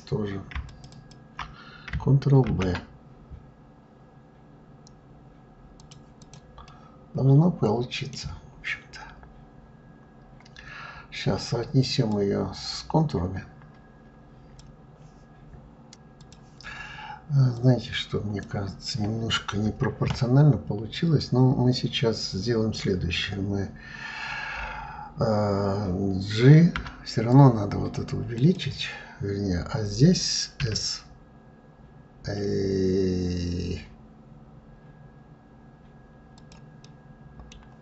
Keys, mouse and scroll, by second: 0.4 shift+click, 0.6 shift+click, 5.9 click, 6.4-8.3 middle drag, 8.3-11.7 scroll down 2, 11.7 scroll down 1, 15.9 click, 17.2 click, 36.5-37.6 middle drag, 37.6-37.8 scroll up 3.